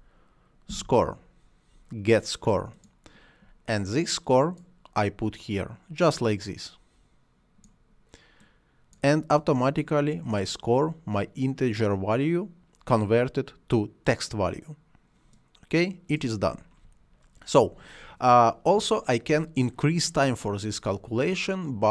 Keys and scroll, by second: 0.0-0.7 typing.